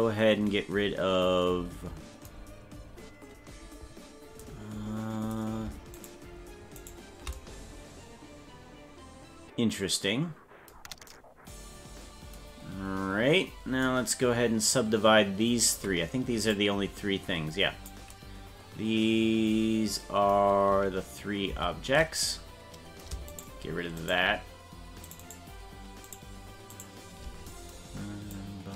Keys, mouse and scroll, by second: 5.9 shift+right click, 6.9 shift+right click, 12.9-13.6 scroll down 6, 16.5-17.9 drag, 21.6 ctrl+z, 23.3 shift+right click, 24.2 shift+right click, 25.2 shift+right click, 25.4 shift+right click, 26.2 shift+right click, 26.8 shift+right click, 28.3 click.